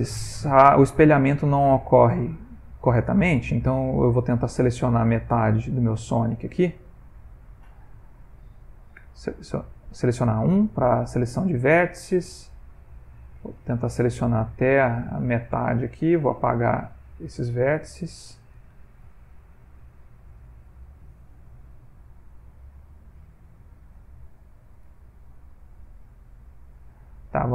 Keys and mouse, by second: 1.6 ctrl+middle click, 3.5 ctrl+middle click, 5.6 click, 6.3 z, 8.1 ctrl+middle click, 9.3 1, 10.4 click, 13.7 ctrl+middle click, 13.8 ctrl+middle click, 15.0 shift+middle click, 15.2 shift+middle click, 16.0 x, 18.1 ctrl+middle click, 18.8-20.7 shift+middle click, 20.0 ctrl+middle click, 20.7 b, 24.8 x, 26.6 ctrl+middle click, 27.2 middle click.